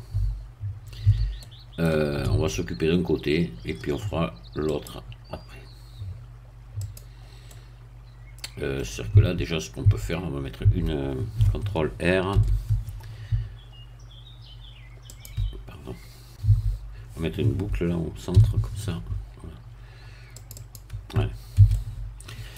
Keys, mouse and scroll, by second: 1.1 a, 1.4 middle click, 2.4 Tab, 4.7 click, 6.8 click, 7.4-9.1 middle drag, 9.1 Tab, 10.3 Tab, 10.6 Tab, 12.4 ctrl+r, 15.1-16.4 drag, 16.4 Tab, 18.3 ctrl+r, 20.4 click, 21.6 a, 21.7-22.5 middle drag.